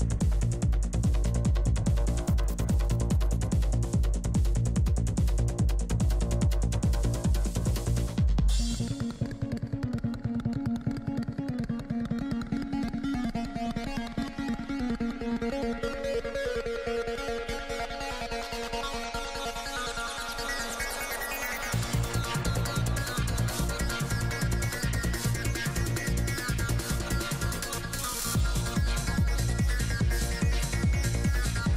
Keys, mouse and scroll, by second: 2.2 shift+c, 2.2 f, 2.8-7.0 drag, 3.0-5.4 middle drag, 6.4-8.7 middle drag, 8.7-9.8 drag, 9.4 r, 10.4 click, 10.8 a, 11.0-12.2 middle drag, 12.2-13.5 drag, 13.5 middle click, 16.2-18.1 drag, 18.1 shift+c, 18.1 f, 18.4 f, 18.7-19.9 drag, 20.5 click, 21.0 ctrl+z, 21.2 shift+f, 21.9 click, 24.9 middle click, 25.7 shift+c, 25.7 shift+f, 25.8-27.4 drag, 26.3 f, 27.4 f, 27.4 i, 27.6-31.1 drag, 29.1 p, 30.2-31.7 middle drag, 31.6-31.7 drag, 31.6 i.